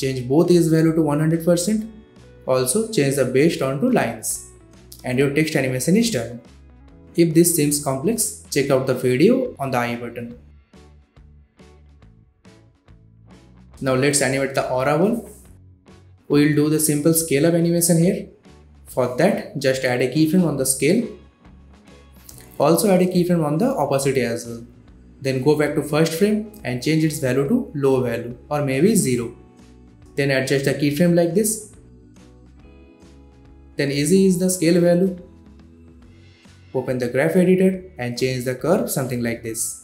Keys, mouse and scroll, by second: 5.2 space, 9.0 space, 9.6-11.2 drag, 12.1-13.1 scroll up 1, 13.1 click, 13.1-19.9 drag, 18.3-19.6 shift+click, 19.9 s, 20.7 click, 21.5 shift+t, 22.2-23.5 drag, 36.3 F9, 37.0-39.8 drag.